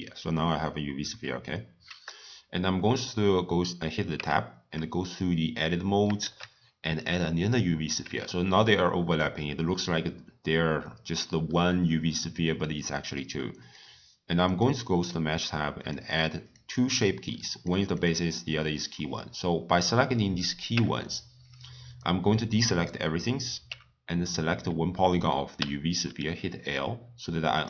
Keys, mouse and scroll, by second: 4.1 Tab, 6.2 shift+a, 8.0 Tab, 13.6 click, 14.4-17.6 drag, 17.9 click, 20.7 Tab, 21.9 click, 23.6 3, 24.2 click, 25.5 l, 27.5-27.6 drag.